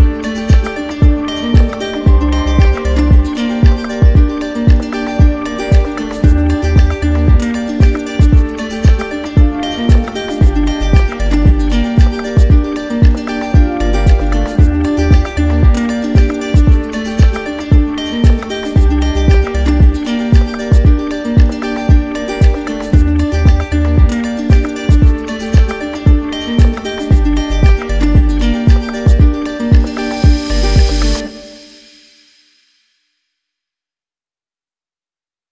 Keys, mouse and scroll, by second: 15.4 ctrl+z, 15.7 ctrl+z, 16.0 ctrl+z, 18.3-19.4 right drag, 20.2-21.3 drag, 24.0 click, 27.0 click, 27.8 q, 28.9 click, 29.4 ctrl+d, 30.0 ctrl+d, 30.2 ctrl+d, 30.7 ctrl+d, 31.7 click, 32.1 shift+click, 33.1 click, 35.0 click.